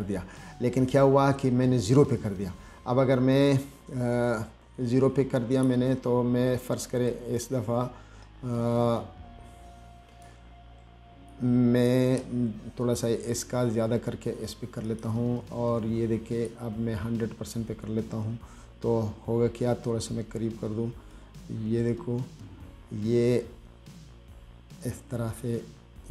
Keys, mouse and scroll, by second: 5.8 click, 7.4-10.5 drag, 11.6 click, 15.1 click, 16.7-17.8 drag, 19.6 scroll up 2, 21.4-26.1 drag.